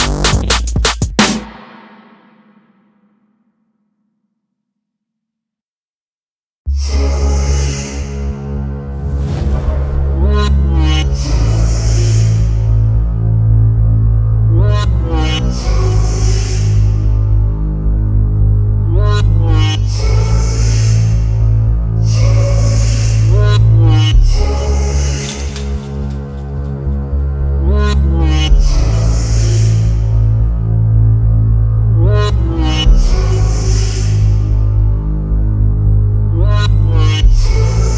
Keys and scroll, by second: 0.4 Tab, 10.2 Escape, 15.3 ctrl+z, 15.9 ctrl+z, 16.9 ctrl+z, 18.9 Escape, 23.7 Escape, 27.0 ctrl+f.